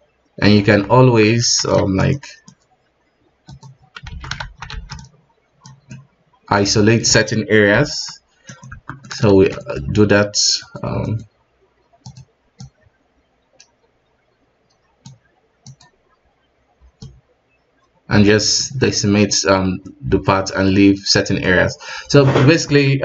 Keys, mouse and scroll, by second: 0.7 KP_1, 1.0 Tab, 1.6 alt+a, 1.9 shift+z, 2.4 click, 3.5 click, 4.1 alt+a, 4.7 shift+z, 5.7 click, 5.9-8.6 middle drag, 8.6 ctrl+g, 8.7 Tab, 9.0 middle click, 9.3 shift+z, 9.6-11.1 middle drag, 11.1-12.2 drag, 12.6-15.8 drag, 17.6-18.6 drag, 18.6-19.0 middle drag, 19.0-19.3 scroll up 2, 19.3-21.6 middle drag, 21.6 click, 22.2-22.5 scroll down 3, 22.5 KP_1.